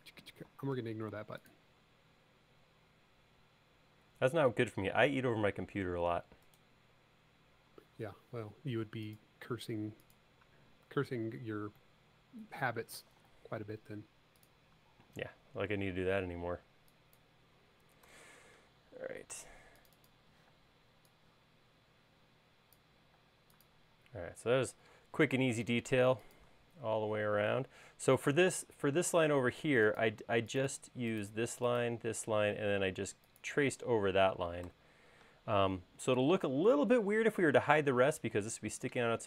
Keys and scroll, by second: 13.6 space, 18.3 BackSpace, 20.7 p, 23.5 space, 34.9 BackSpace.